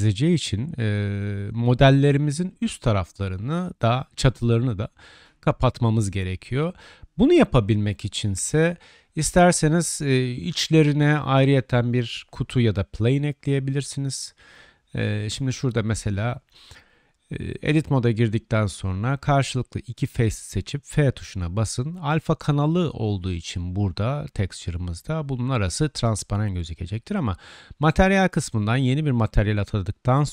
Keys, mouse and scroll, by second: 2.1-4.1 drag, 4.2 alt+click, 5.1 alt+h, 5.2-6.5 drag, 6.6 click, 7.3-16.5 drag, 7.3-7.9 right drag, 12.4 middle click, 12.4 right click, 17.6 Tab, 18.2 click, 18.4-20.6 middle drag, 20.6-21.6 drag, 20.6 2, 21.6-23.0 shift+middle drag, 22.6 shift+click, 22.6 shift+right click, 23.0-25.5 drag, 23.7 f, 24.5 right click, 25.5 middle click, 25.6 click, 26.3 Tab, 26.8 Tab, 27.2 click, 28.4 3.